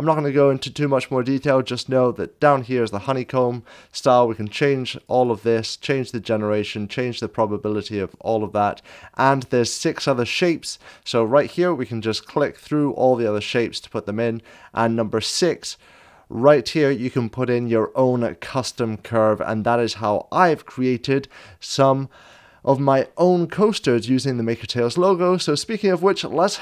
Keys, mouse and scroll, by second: 4.8 click, 4.8 scroll up 1, 7.1 click, 8.8-10.7 scroll up 1, 12.1 click, 12.1 scroll down 1, 15.5 scroll down 1, 15.9 click, 19.0 scroll up 2, 19.6 scroll down 2, 19.7 scroll up 1, 22.2 click, 22.2-24.2 scroll down 2.